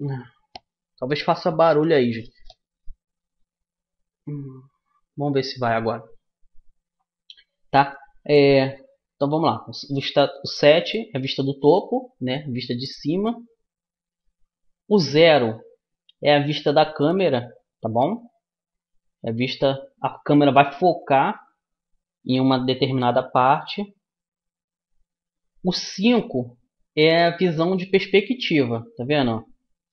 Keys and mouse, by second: 10.3 KP_7, 11.5-15.2 middle drag, 15.0 KP_0, 26.3 KP_5.